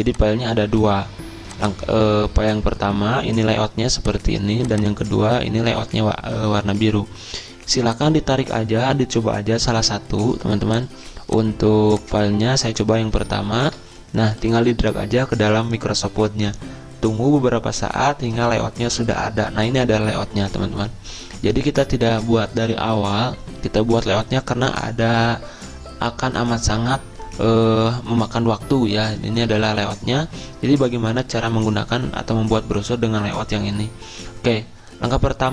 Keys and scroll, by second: 0.0-0.8 typing, 13.2 alt+Tab.